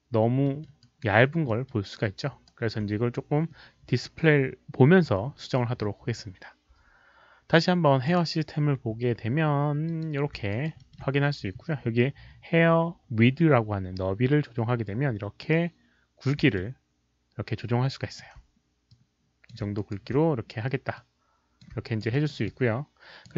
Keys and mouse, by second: 0.4 alt+middle click, 0.8 alt+right click, 1.4 alt+middle click, 2.4 alt+right click, 2.6 alt+middle click, 2.6 click, 3.4 alt+right click, 3.4 alt+middle click, 3.4 click, 5.6 alt+right click, 5.6 alt+middle click, 6.0 alt+middle click, 6.0 click, 8.0 click, 9.8 click, 10.5 alt+right click, 10.7 alt+middle click, 14.8-16.2 drag, 16.5-18.1 alt+drag, 18.8 alt+middle click, 18.8 alt+right click, 18.8 alt+click, 19.7 alt+right click, 20.9 alt+click, 21.8 alt+right click, 22.1 alt+middle click, 22.4 alt+click, 23.2 alt+middle click, 23.2 alt+right click.